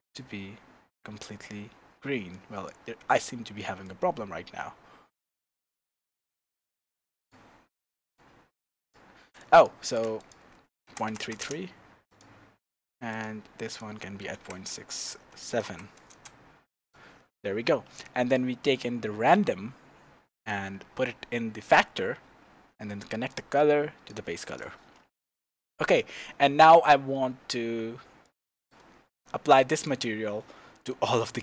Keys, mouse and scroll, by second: 3.8-8.2 drag, 9.4 click, 10.2-12.2 drag, 11.2 KP_3, 13.1 click, 13.7-16.9 drag, 14.5 KP_6, 16.7 KP_Enter, 18.0 click, 19.3-24.6 drag, 25.1-28.2 shift+middle drag, 26.6-28.2 scroll down 2, 28.2-29.9 drag, 30.7-31.4 middle drag.